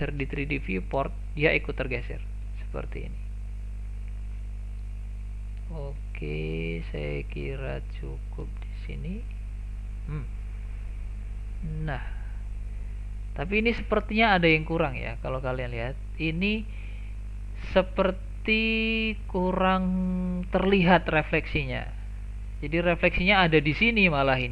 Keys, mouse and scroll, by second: 1.3-2.2 scroll down 1, 2.3-2.6 scroll up 1, 2.6-5.6 shift+middle drag, 6.0-9.1 shift+middle drag, 9.1-9.8 scroll down 1, 9.8-11.7 scroll up 1, 11.7 click, 12.2-12.9 scroll down 2, 13.6-16.6 scroll up 2, 21.6-22.5 scroll down 4, 22.5-23.6 scroll up 2, 24.2-24.5 scroll down 1.